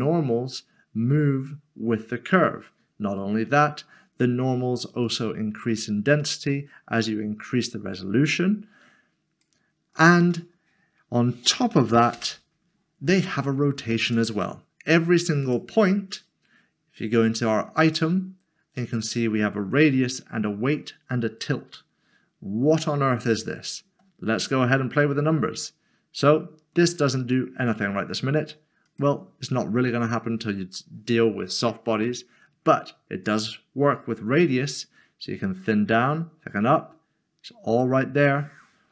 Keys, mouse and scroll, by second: 2.3 click, 3.2 ctrl+z, 5.0 ctrl+z, 11.7 typing, 12.2 Return, 14.0 click, 17.8 click, 25.7 click, 33.2 click.